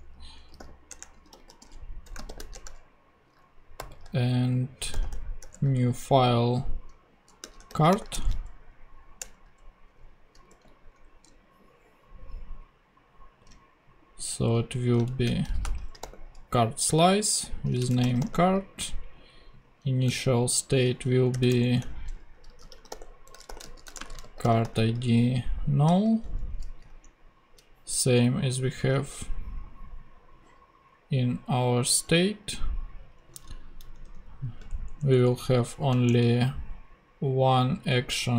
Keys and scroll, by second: 0.3-2.9 typing, 3.3 super+Return, 3.8 super+n, 4.9 super+f, 5.0 typing, 5.4 Return, 7.2-8.2 typing, 9.2 Return, 10.5 super+v, 14.8 Left, 15.4-18.5 typing, 20.2 shift+Right, 21.3-25.9 typing, 21.6 shift+Return, 26.8 ctrl+,, 26.9 ctrl+Tab, 33.9 super+Up, 34.0 super+Left, 34.6 shift+super+Left, 34.7 shift+super+Down, 36.1 shift+BackSpace, 37.0 BackSpace.